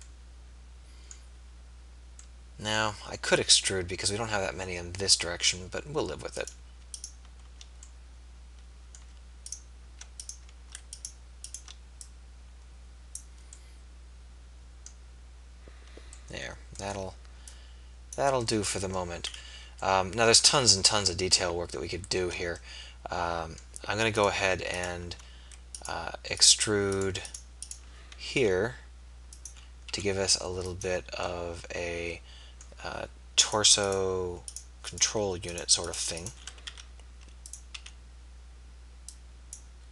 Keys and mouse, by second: 13.7 middle click, 18.6 middle click, 28.3 e, 29.9 s, 36.8 e, 37.8 s.